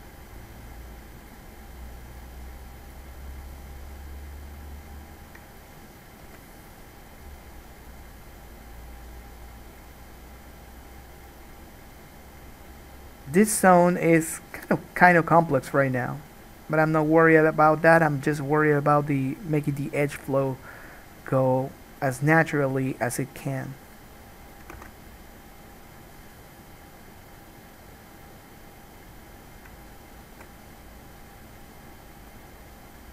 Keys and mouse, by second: 2.5-11.5 drag, 13.0 click, 13.3 click, 13.7 click, 25.0 ctrl+z.